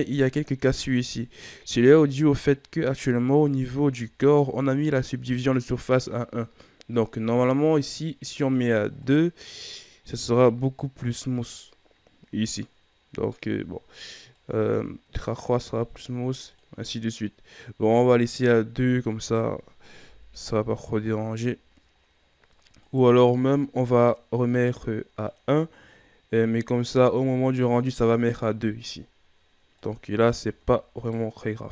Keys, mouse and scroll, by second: 1.4-2.8 scroll up 1, 2.8 right click, 3.6-4.2 scroll down 5, 4.2-6.4 shift+scroll up 4, 7.6-10.0 drag, 10.0-13.2 scroll up 4, 14.3-19.3 drag, 19.3-20.0 scroll down 1, 20.0 KP_1, 20.6 a, 21.0 scroll down 4, 22.0-22.8 scroll up 4, 22.8 right click, 24.0-28.2 drag, 29.7 click, 30.3-30.9 shift+scroll down 3, 30.9 right click.